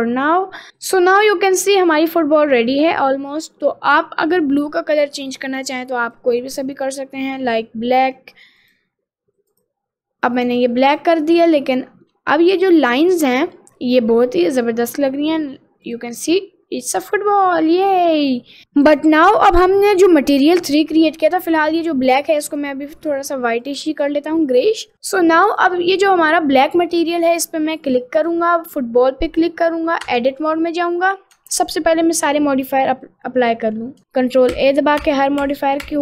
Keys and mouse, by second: 1.4 middle click, 6.1 click, 7.5 click, 8.7 click, 11.9 middle click, 13.6 middle click, 14.1 middle click, 14.5 middle click, 14.9 middle click, 15.5 middle click, 16.2-18.1 middle drag, 21.5 click, 25.5 click, 26.4 middle click, 27.0 middle click, 28.2 click, 30.1 Tab, 32.2 click, 34.5 ctrl+a, 35.1 ctrl+a, 35.5 ctrl+a, 35.9 ctrl+a.